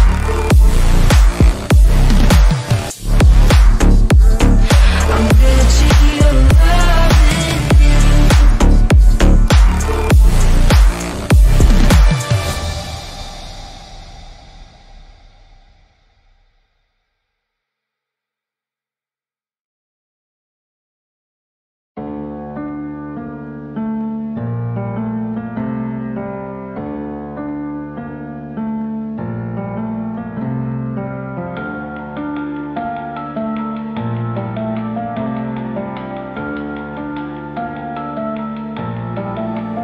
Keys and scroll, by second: 2.2 Delete, 3.2 shift+F2, 9.2 shift+F2, 16.2 ctrl+g, 24.2 shift+F2, 24.4 Escape, 26.0 Escape, 36.2 F3, 39.7 F3.